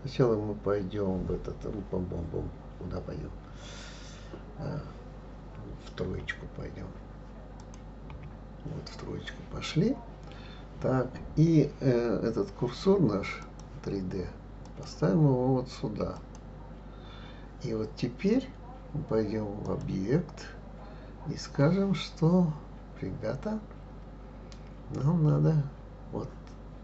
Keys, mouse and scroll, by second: 6.2 KP_3, 7.6 click, 8.1 KP_3, 9.3-11.1 scroll up 1, 13.4-14.8 drag, 16.2 click, 19.6-22.6 drag.